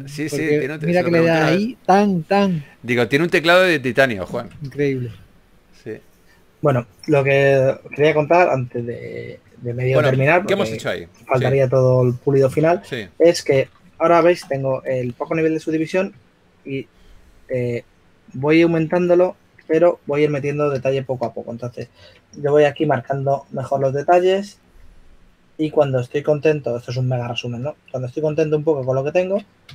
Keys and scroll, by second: 1.0 s, 7.0 shift+f, 11.7 shift+f, 16.5 shift+f, 17.8 d, 22.7-24.6 typing.